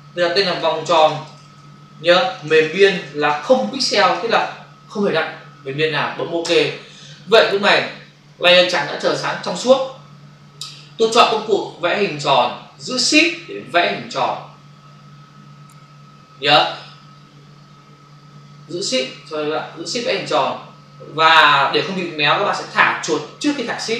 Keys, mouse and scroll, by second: 0.2-4.7 typing, 6.4 Return, 11.3 click, 13.6 shift+click, 19.5 ctrl+d, 20.0 shift+click.